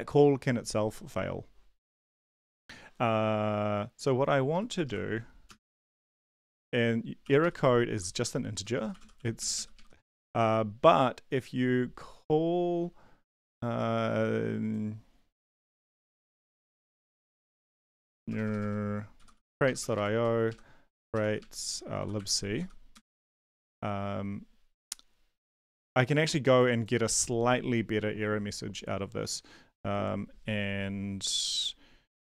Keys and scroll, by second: 4.7-9.7 typing, 9.7 Right, 10.1 Right, 18.4-23.1 typing.